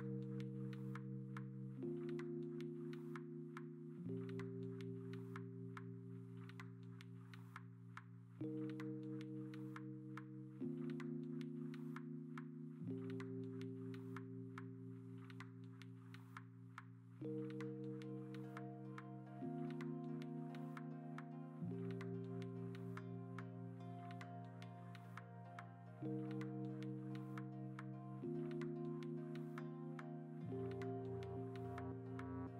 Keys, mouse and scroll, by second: 0.0-0.5 typing, 0.9 ctrl+alt+z, 0.9 ctrl+alt+z, 1.9 ctrl+z, 3.1 ctrl+z, 3.2 1, 3.5 ctrl+d, 4.1 ctrl+alt+z, 7.8 b, 8.6 ctrl+z, 9.1 4, 9.8 ctrl+alt+g, 12.2-13.2 typing, 14.4-15.2 typing, 16.2 ctrl+g, 16.4 typing, 18.6 ctrl+v, 19.2 ctrl+t, 19.6 Escape, 21.5 Escape, 23.5-26.1 typing, 25.0 alt+Tab, 25.3 alt+BackSpace, 26.0 alt+BackSpace, 28.2-29.0 typing, 29.0 ctrl+w, 29.9 ctrl+t.